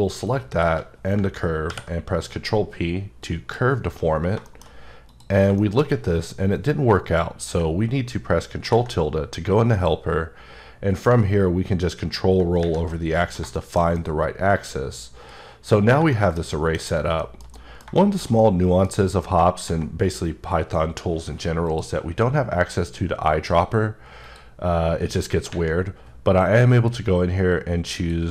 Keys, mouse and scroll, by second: 0.5 shift+click, 1.7 p, 3.2 click, 4.0-4.5 scroll down 3, 4.5 shift+middle click, 4.7 scroll up 1, 5.1 click, 5.6 shift+middle click, 9.7 click, 11.4-12.4 ctrl+scroll up 2, 12.9 middle click, 16.9-17.2 scroll up 2, 17.2 shift+middle click, 21.7 click, 23.3 click, 24.3 click, 26.5 click, 28.0 click.